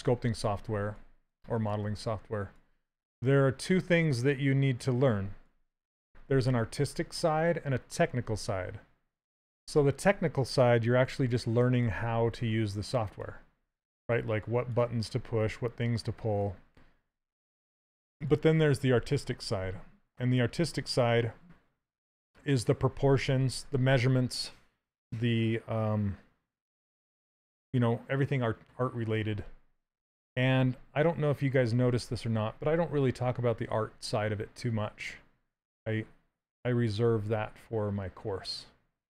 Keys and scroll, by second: 10.9 s.